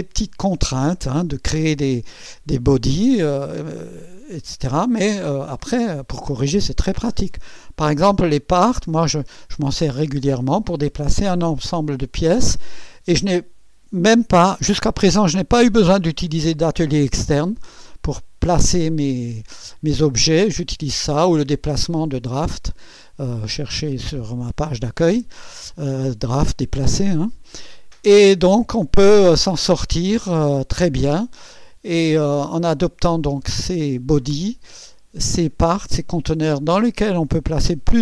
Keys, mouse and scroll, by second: 29.3 scroll down 2, 30.4-31.8 drag, 32.2 scroll up 2, 32.8 scroll down 1.